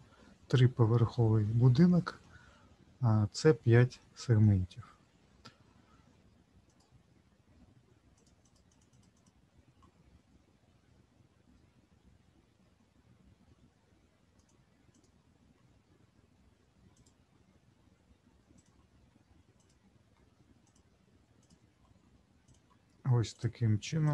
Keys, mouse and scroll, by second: 6.2 ctrl+r, 6.7 click, 8.1 click, 8.4 click, 8.7 click, 8.9 click, 9.1 click, 14.4 click, 14.9 click, 16.9 click, 18.5 click, 19.6 click, 20.6-21.1 shift+click, 21.4 click, 22.4 shift+click, 23.3 shift+click, 24.0 shift+click.